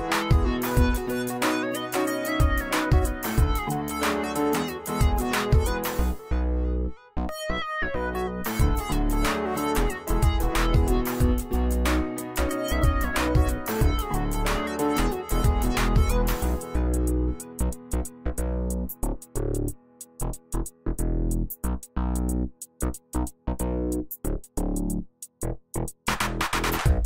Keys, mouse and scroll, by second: 1.1-1.8 alt+shift+click, 5.7 right click, 6.0 click, 6.1 right click, 8.3 click, 10.1 right click, 12.4 click, 14.3 right click, 17.5 click, 20.8-21.8 alt+shift+click, 22.8 ctrl+z, 23.9-24.9 alt+shift+drag.